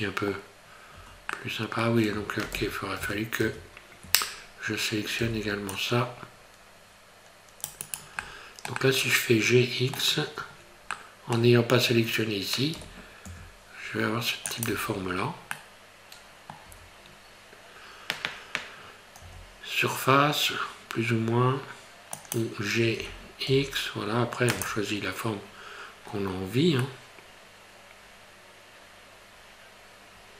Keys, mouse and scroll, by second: 0.6-0.9 scroll up 2, 0.9 Tab, 1.4 middle click, 2.5 ctrl+z, 3.0 ctrl+z, 3.4 ctrl+z, 4.4 scroll up 2, 5.2 c, 8.2 middle click, 8.8 middle click, 11.1 middle click, 12.7 g, 14.7 Tab, 15.1 scroll down 3, 15.5 middle click, 16.7 Tab, 17.1 scroll up 2, 19.2 s, 23.0 g.